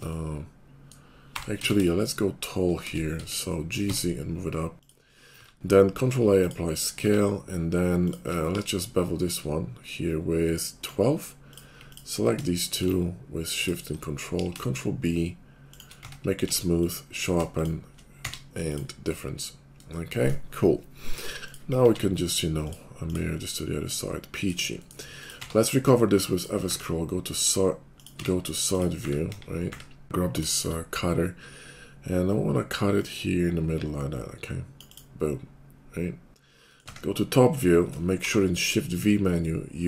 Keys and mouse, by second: 1.3 g, 5.4 ctrl+a, 6.9 Tab, 8.5 ctrl+b, 12.2 shift+middle click, 12.5 shift+click, 13.3 ctrl+middle click, 13.5 ctrl+click, 13.6 ctrl+middle click, 14.3 ctrl+b, 14.3 ctrl+middle click, 14.6-15.9 shift+middle drag, 16.0 Tab, 16.5 q, 17.4 shift+middle click, 17.6 shift+click, 17.9-21.4 middle drag, 18.1 q, 21.4 click, 21.5 middle click, 21.7-22.8 alt+middle drag, 21.8 alt+x, 23.1 click, 23.5-24.7 middle drag, 24.7 shift+click, 24.9 middle click, 25.2 click, 25.4-26.4 middle drag, 25.4 q, 27.3 middle click, 27.9 click, 28.0 middle click, 28.1 q, 29.3 KP_5, 29.6 `, 30.0 d, 30.4 shift+click, 33.1-39.8 drag, 38.1 shift+v.